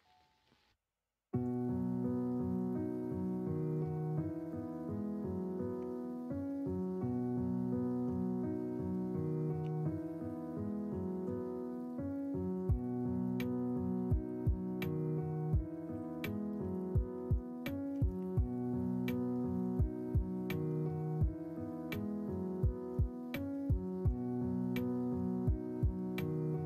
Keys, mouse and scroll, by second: 3.9 middle click, 5.5 middle click, 5.7 Tab, 6.4 middle click, 7.4 shift+middle click, 8.3 middle click, 9.6 3, 10.9 g, 16.3 middle click, 16.6 Tab, 17.2 alt+z, 17.6 middle drag, 17.9 alt+z, 18.4-18.9 middle drag, 19.0 middle click, 19.5 middle click, 20.4 middle drag, 20.8 shift+middle drag, 21.4 middle drag, 21.9 shift+middle click, 23.1 shift+middle drag, 24.2 shift+middle drag, 24.7 middle drag, 25.4 shift+middle drag, 25.9-26.6 middle drag.